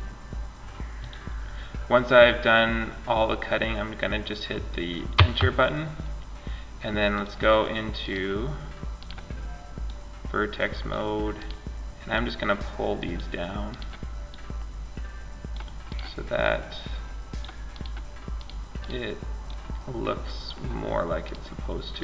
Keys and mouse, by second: 6.3 click, 7.2 right click, 8.1 middle click, 8.3 click, 9.0-10.0 right drag, 10.0 click, 12.3 click, 14.7 click, 17.0 right click, 20.5 right click.